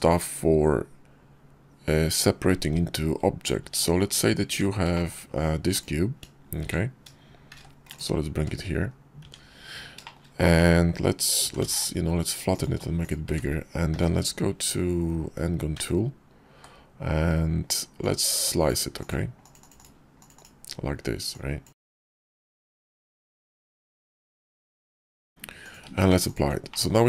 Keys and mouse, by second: 3.4 `, 4.3 Tab, 5.5 click, 6.4-9.0 typing, 9.9 shift+click, 10.4-10.8 drag, 11.2 s, 12.5 s, 13.1 `, 13.8 `, 15.6 d, 17.8-18.5 drag, 21.2-21.5 drag, 23.4-23.7 drag, 25.7 q, 26.6 middle drag.